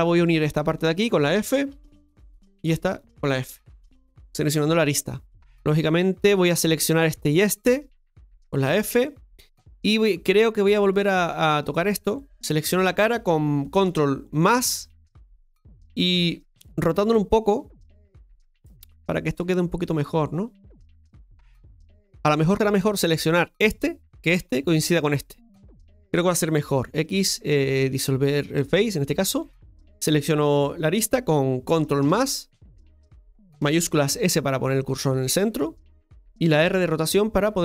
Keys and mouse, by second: 0.1 right click, 0.9 shift+right click, 1.9 f, 2.5-3.5 right drag, 6.8 right click, 7.6 shift+right click, 8.6 f, 10.8 click, 11.5 right click, 14.4 ctrl+KP_Add, 20.6 right click, 28.8 x, 29.7 right click, 32.0 ctrl+KP_Add.